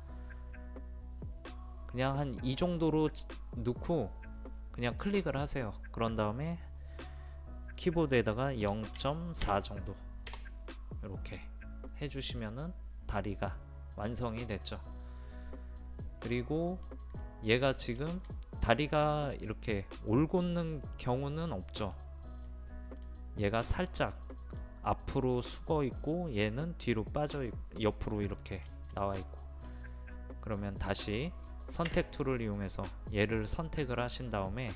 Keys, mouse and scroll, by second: 8.7 KP_0, 9.0 KP_Decimal, 9.5 KP_4, 12.4-29.2 middle drag, 32.8 space.